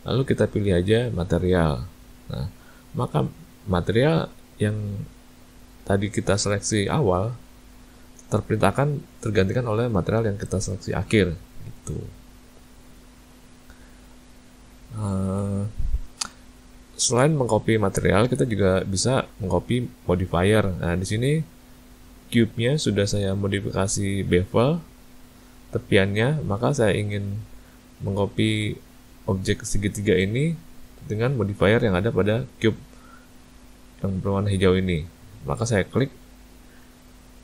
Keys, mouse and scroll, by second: 12.6 click, 15.4 a, 15.5 a, 26.6 click, 27.9 shift+click, 29.0 shift+click, 29.9 shift+click, 37.3 shift+click.